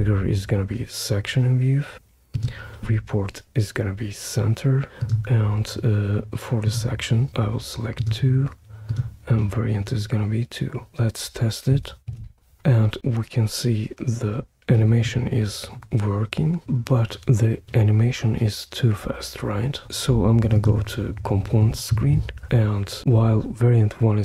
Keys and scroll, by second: 12.1 super+p.